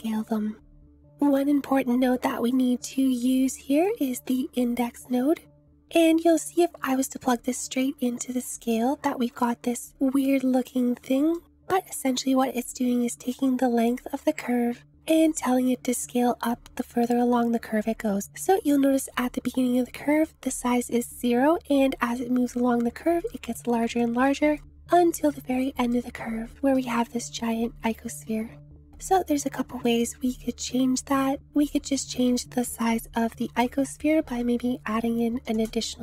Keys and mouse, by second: 2.7 click, 4.1 shift+a, 6.9 click, 9.4 click, 9.9-10.4 shift+drag, 23.3 shift+middle click, 24.0 shift+click, 24.6 middle click, 24.8 click, 25.1 click, 25.9 middle click, 28.9-33.5 drag, 33.5 Left, 34.2 Right.